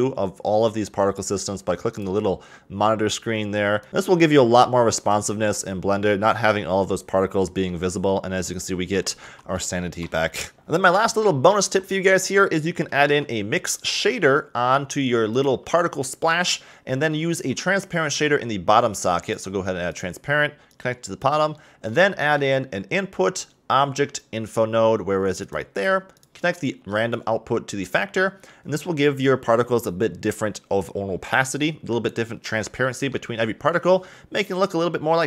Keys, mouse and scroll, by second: 2.4 click, 7.1 click, 7.6-9.0 middle drag, 9.0 a, 9.2 a, 9.8-10.6 shift+middle drag, 10.6 click, 13.0 shift+a, 17.3 shift+a, 20.7 click, 21.5-22.1 middle drag, 22.1 shift+a, 27.1 click, 32.5 scroll down 2, 32.8-35.2 middle drag.